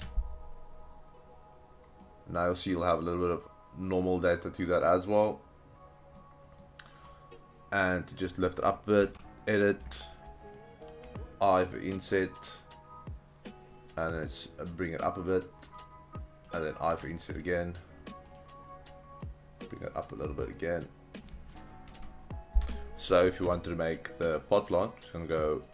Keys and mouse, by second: 0.0 ctrl+space, 0.0 ctrl+click, 2.0-5.3 middle drag, 6.2 middle click, 7.9-8.5 middle drag, 9.0 Tab, 10.9 i, 12.5 click, 14.8 click, 15.8 click, 18.3 click, 19.3 click, 21.9 Tab, 22.3 ctrl+z, 22.3 Delete, 23.3 shift+a.